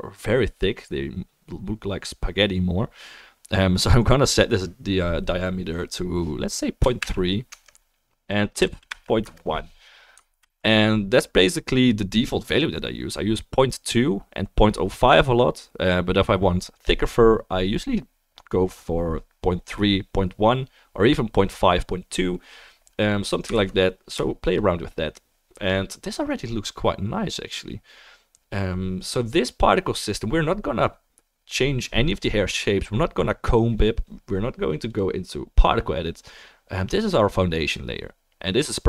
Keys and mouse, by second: 4.3-8.0 drag, 8.3-12.9 drag, 8.3-12.9 middle drag, 8.3-12.9 right drag, 10.6 ctrl+s, 23.7 ctrl+s, 24.5-25.0 shift+drag, 24.5-25.0 shift+middle drag, 24.5-25.0 shift+right drag.